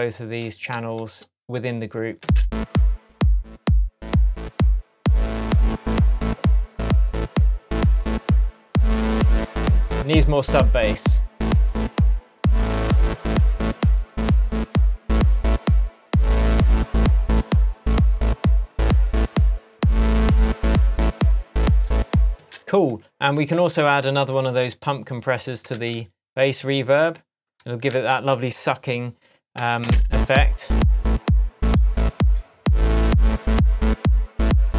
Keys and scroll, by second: 3.2 space, 22.3 space, 25.7 super+c, 27.9 super+v, 29.8 space.